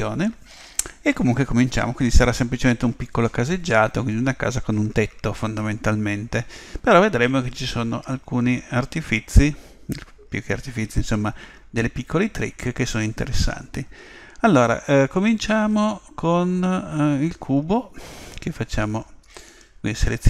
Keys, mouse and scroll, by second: 13.8-16.8 middle drag.